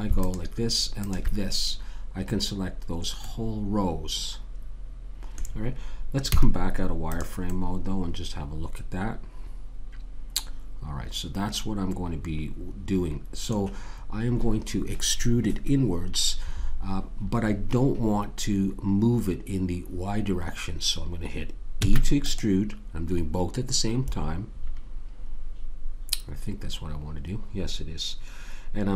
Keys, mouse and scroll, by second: 0.2 click, 1.6 click, 2.2 middle click, 3.3-5.0 middle drag, 6.3 z, 7.1-9.3 middle drag, 21.8 e.